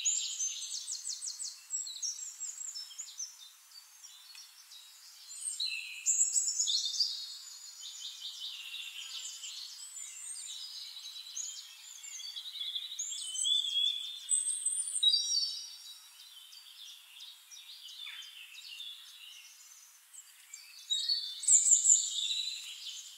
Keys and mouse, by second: 1.5 click, 2.3 click, 2.3 middle click, 3.2 Delete, 3.9-4.9 drag, 5.1 click, 5.8 shift+-, 6.8 click, 8.0 click, 8.7 click, 9.2 click, 9.9 shift+-, 10.9 drag, 11.2 click, 12.1 click, 12.7 click, 15.8 click, 17.8 click, 18.8 click, 19.2 click, 20.2 click, 21.8 click.